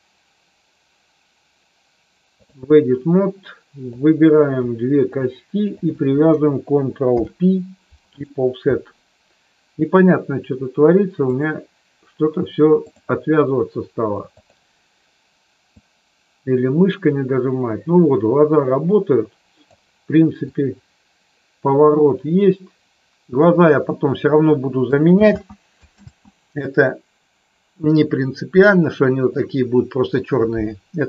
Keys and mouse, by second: 4.0 click, 5.2 shift+click, 7.2 ctrl+p, 11.3-13.0 drag, 14.3 click, 15.7-19.7 drag, 20.5-23.3 drag, 25.2 ctrl+z, 29.3 middle click, 30.9 KP_3.